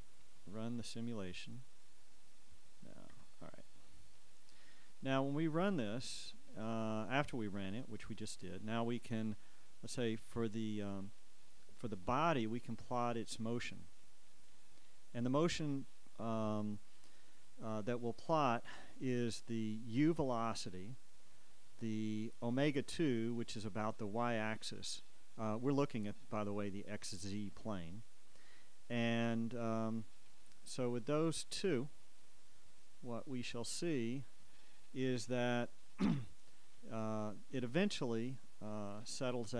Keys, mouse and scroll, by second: 1.7 click, 3.3 Escape, 5.9-9.2 drag, 11.4 right click, 13.0 click, 14.6 click, 20.1-21.3 drag, 22.9 click, 33.7 click, 39.1 click.